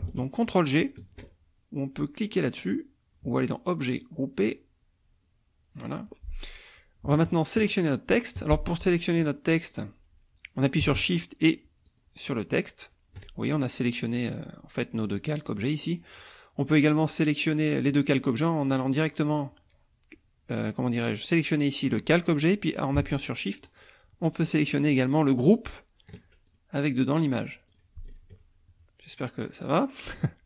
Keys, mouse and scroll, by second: 3.8 click, 5.7 click, 7.7 shift+click, 8.9 shift+click, 9.7 click, 12.0 shift+click, 15.9 click, 17.4 click, 23.6 shift+click, 26.5 shift+click, 27.7 click, 28.1 shift+click.